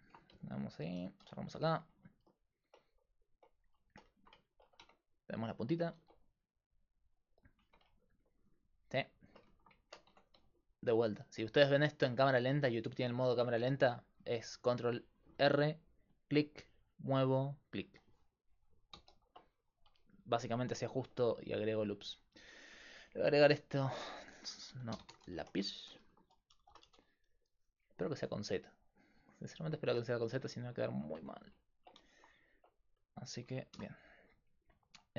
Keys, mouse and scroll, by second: 0.9 alt+p, 1.5 Tab, 4.9 Tab, 6.0 ctrl+r, 7.7 Tab, 10.1 Tab, 14.6 ctrl+e, 15.4 ctrl+r, 19.0 ctrl+z, 23.7-26.9 drag, 31.2 Tab, 33.8 shift+s.